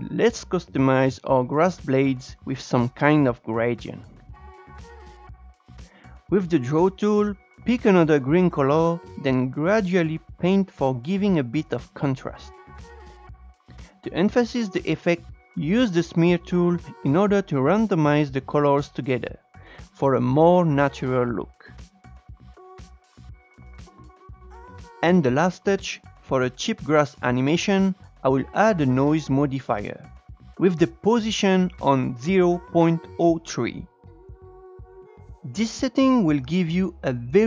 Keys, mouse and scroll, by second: 0.1 click, 1.4 shift+middle click, 2.2-2.7 scroll down 4, 2.7-3.1 shift+middle drag, 3.1 scroll up 1, 3.3-5.4 shift+middle drag, 5.4 click, 6.1 e, 7.3 scroll down 3, 7.5-7.9 scroll up 1, 7.9-8.2 scroll down 3, 8.2-10.3 drag, 10.3 scroll up 3, 10.5-13.6 drag, 15.0 click, 15.4-15.7 scroll up 1, 15.7-19.3 drag, 19.3 f, 19.4 f, 20.1-23.8 drag, 23.8 scroll down 3, 24.0 scroll up 1, 24.3 click, 24.5 e, 25.2 Tab, 26.5-33.5 drag, 35.3-36.1 scroll up 2, 36.1-36.5 scroll up 2.